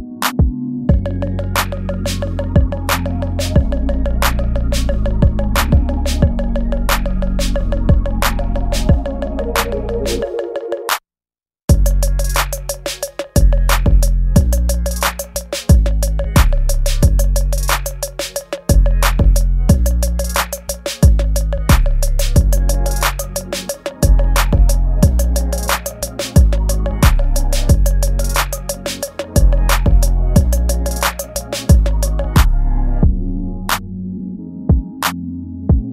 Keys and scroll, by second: 0.1 space, 1.3 space, 3.7 ctrl+z, 4.8 space, 5.7 ctrl+z, 8.2 space, 16.3 space, 16.9 space, 17.1 ctrl+z, 17.5 space, 19.2 space, 29.5 ctrl+z, 30.0 ctrl+s, 30.8 space, 31.3 space, 32.6 space, 32.8 ctrl+z, 33.8 ctrl+z.